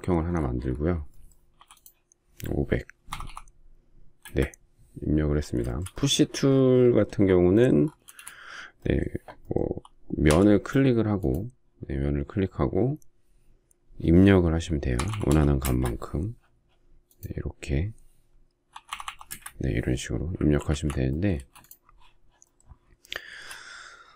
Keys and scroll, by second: 1.6 p, 3.0 typing, 4.2 Return, 8.0 space, 10.3 p, 14.9-15.3 typing, 15.6 Return, 18.7-19.0 typing, 19.3 Return, 20.4 ctrl+z, 21.3 space.